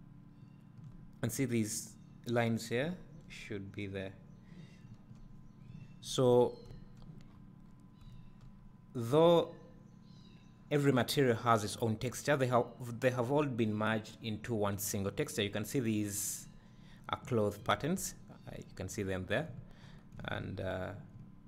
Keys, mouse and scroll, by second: 7.3 scroll up 1, 8.0 scroll down 1, 8.1 `, 8.6-9.8 scroll down 1, 9.8 scroll up 1, 15.6-17.7 middle drag, 17.7-20.7 middle drag.